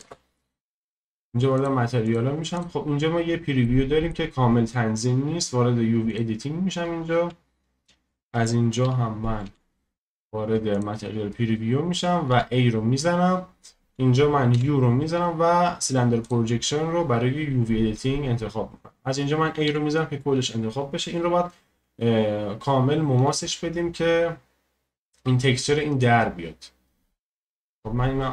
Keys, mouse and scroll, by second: 0.0 ctrl+space, 1.6 click, 3.6 middle click, 4.3-6.1 scroll down 1, 6.1-8.5 drag, 12.3 a, 13.0-16.3 scroll down 1, 16.3 u.